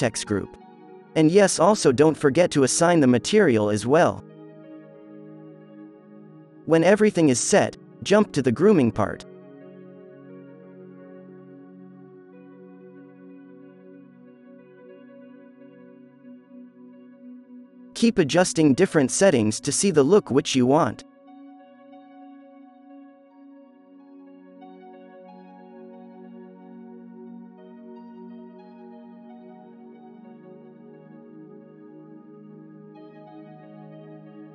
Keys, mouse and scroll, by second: 1.4-6.5 drag, 5.8 f, 7.1 f, 7.4-8.5 drag, 10.2 f, 10.3 click, 10.8 f, 10.8 click, 11.3 click, 11.8 click, 12.0 f, 12.7 click, 14.2 f, 16.6 f, 17.4-18.6 drag, 17.9 f, 19.9 f, 20.8 f, 21.0 ctrl+z, 21.1 f, 21.1-21.6 middle drag, 21.3 ctrl+z, 21.5 ctrl+z, 22.5 ctrl+z, 23.2 f, 25.5 click, 25.8 f, 26.3 f, 26.6 f, 27.3 f, 28.8-31.4 middle drag, 31.8-34.5 middle drag.